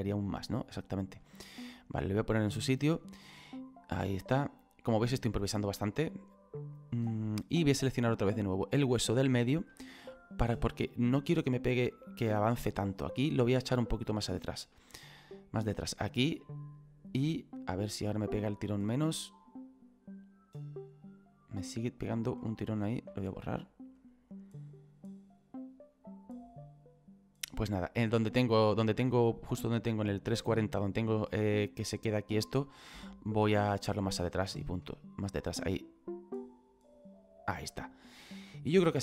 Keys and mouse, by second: 1.0 click, 1.8 right click, 4.0 click, 8.2 right click, 8.8 middle click, 10.2 click, 14.0 click, 15.9 click, 24.0 click, 33.8 click, 36.0 click.